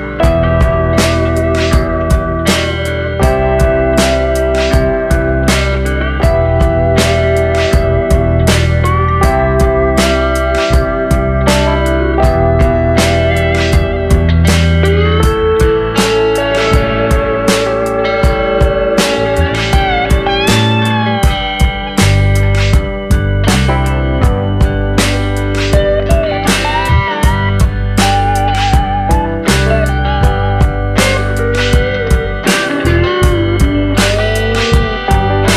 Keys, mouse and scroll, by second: 0.3 click, 0.9 click, 2.6 click, 4.9 click, 5.5 click, 6.0 click, 6.4 click, 6.7 click, 7.0 click, 8.3 click, 8.7 click, 9.2 click, 9.5 click, 9.9 click, 10.5 scroll down 2, 10.8 middle click, 15.8 click, 16.5 click, 17.0 click, 17.4 click, 17.7 click, 18.7-19.5 scroll up 3, 19.5 click, 22.7 click, 23.3 click, 29.4 click, 30.2 click, 31.0 click, 31.9 click, 32.2 click, 32.6-33.8 scroll down 3, 32.8 middle click, 34.2 scroll up 3, 34.8 click, 35.3 click.